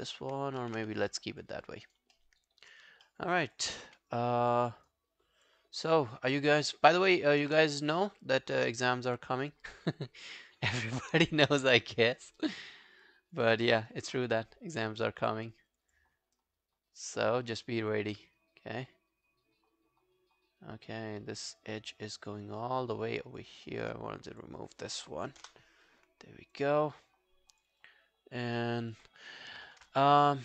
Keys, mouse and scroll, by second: 0.6 ctrl+z, 1.1 alt+middle click, 1.4 alt+click, 1.9 alt+right click, 2.2 alt+middle click, 3.0 alt+middle click, 3.3 alt+right click, 3.6 alt+click, 3.9 q, 4.1 right click, 5.7 scroll down 1, 6.0 alt+click, 6.8 alt+middle click, 7.0 alt+right click, 7.2 alt+click, 9.0 click, 9.0 alt+scroll down 1, 10.2 alt+click, 12.0 alt+middle click, 12.2 alt+right click, 12.4 alt+click, 13.6 alt+middle click, 13.8 alt+right click, 14.3 right click, 15.9 double click, 16.2 scroll down 2, 16.4 alt+click, 20.7 alt+click, 23.7 alt+middle click, 25.4 ctrl+BackSpace, 26.5 alt+scroll down 1, 26.6 alt+click, 27.8 alt+click, 28.6 alt+middle click, 28.8 alt+right click, 29.1 alt+click.